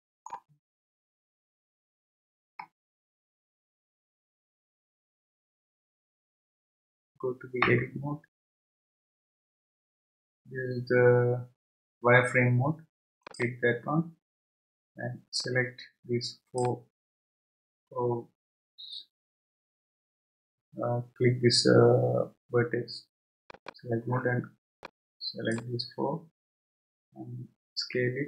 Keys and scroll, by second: 7.6 Tab, 27.8 s.